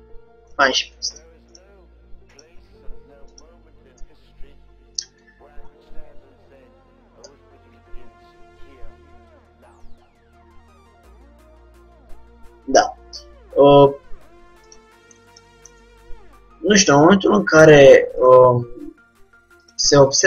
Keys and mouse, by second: 0.6-2.2 drag, 0.9 g, 2.5-4.1 drag, 2.5 g, 5.1-6.8 drag, 6.8-10.8 middle drag, 7.4 g, 15.5-17.2 middle drag, 17.7-20.2 drag, 18.6 g.